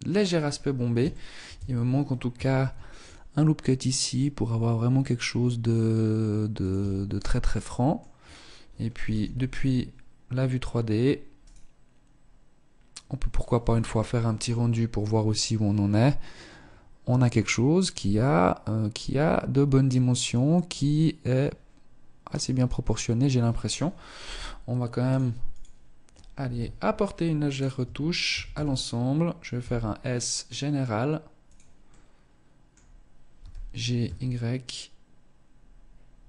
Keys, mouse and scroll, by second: 0.3 shift+middle click, 0.7 Tab, 1.7 ctrl+r, 5.9 Tab, 6.3-6.9 scroll down 4, 6.7 middle click, 7.4-8.3 scroll down 1, 8.3 scroll down 1, 8.3 KP_0, 10.7 right click, 24.8 click, 25.7 KP_1, 26.1 scroll up 2, 26.8 right click, 27.0 Tab, 27.5 a, 27.7 a, 28.8 s, 30.7 click, 31.2 middle click, 32.5 g, 35.8 Tab, 36.1 scroll down 5.